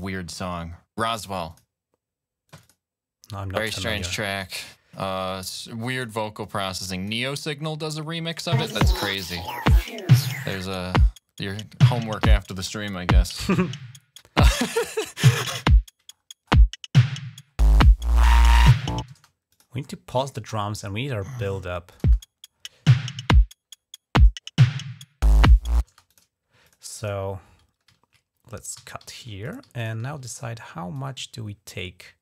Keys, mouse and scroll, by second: 1.3 click, 2.3 click, 3.7 click, 4.3 click, 4.4 click, 5.1 click, 6.3 click, 7.5 click, 8.3 click, 8.5 space, 8.8 click, 9.9 click, 11.8 g, 12.1 scroll down 2, 12.5 scroll up 2, 12.9 scroll down 2, 13.7 ctrl+scroll up 1, 14.5-15.5 scroll down 2, 15.9-16.4 scroll up 2, 17.3-17.7 scroll down 1, 18.3 scroll up 1, 19.0-19.9 typing, 19.4 click, 19.7-20.1 scroll down 2, 20.6 scroll down 1, 21.0 scroll up 1, 21.8 click, 21.8 space, 22.0 scroll up 1, 23.1 typing, 25.7 space, 25.9 click, 26.5 ctrl+click, 27.8-28.2 ctrl+scroll up 1, 28.6-29.1 typing, 29.0 ctrl+scroll down 1, 29.3 click, 29.6 ctrl+click, 30.2 ctrl+click, 30.8-32.2 drag.